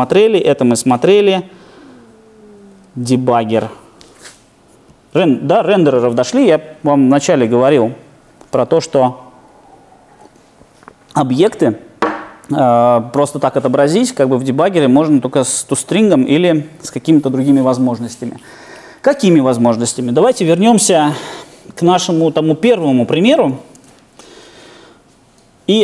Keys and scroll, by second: 1.1 ctrl+6, 2.7 ctrl+5, 23.7 ctrl+2, 25.6 ctrl+2.